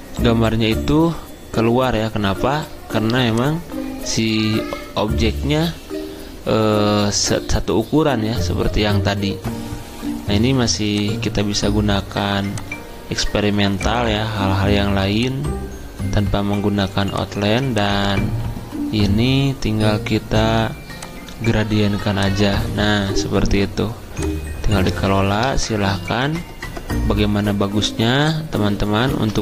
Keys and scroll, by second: 29.1 ctrl+z.